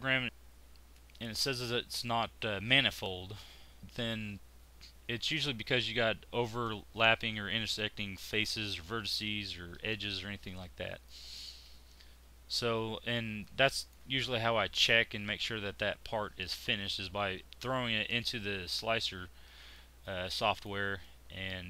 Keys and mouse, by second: 11.7-13.4 drag, 18.5 middle click, 19.4 click.